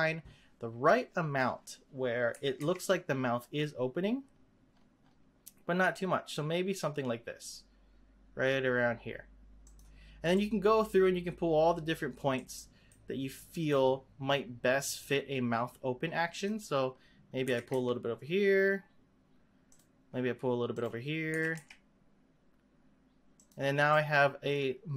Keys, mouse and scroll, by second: 0.3-2.2 scroll up 1, 2.3 g, 10.3-15.0 middle drag, 15.0 click, 16.4 click, 17.4 g, 20.7 click, 21.3 g, 23.9-24.9 middle drag.